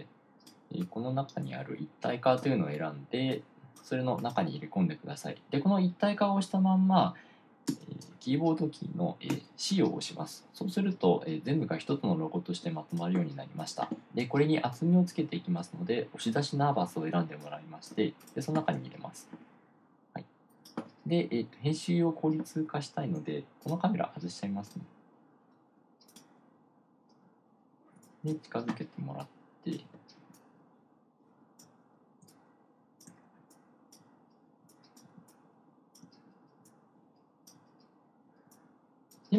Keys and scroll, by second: 9.8 c, 28.4 1, 29.6-39.3 typing.